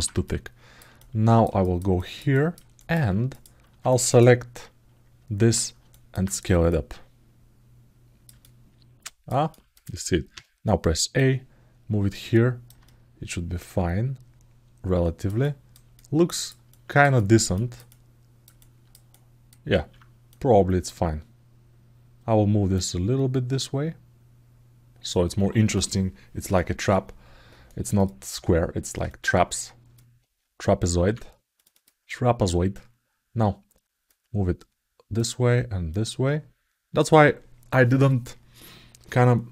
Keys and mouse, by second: 0.0 alt+middle click, 0.1 click, 0.2 alt+middle click, 0.7 ctrl+alt+middle click, 1.4 alt+shift+middle click, 1.7 middle click, 2.1 ctrl+alt+middle click, 2.5 alt+middle click, 3.1 click, 3.7 click, 3.8 click, 5.7 alt+middle click, 6.5-8.0 drag, 8.2 alt+middle click, 9.3 ctrl+alt+middle click, 10.9-12.4 drag, 12.6-15.0 alt+middle drag, 15.2 alt+shift+middle click, 15.7 alt+middle click, 16.5 ctrl+alt+middle click, 16.9 alt+middle click, 17.3 ctrl+alt+middle click, 17.6 alt+middle click, 18.4 ctrl+alt+middle click, 18.8 alt+middle click, 19.5 alt+z, 20.0 click, 22.6-24.8 drag, 27.7 click, 28.8 alt+middle click, 31.3 click, 31.5 click, 33.8-34.9 drag, 35.8 click.